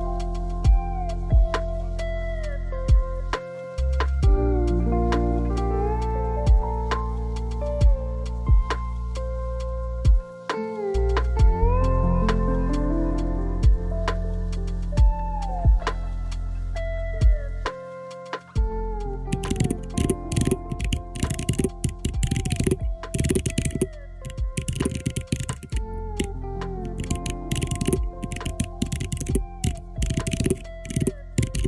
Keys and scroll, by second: 9.2 3, 9.5 Return, 16.9 4, 17.1 4, 17.2 Return.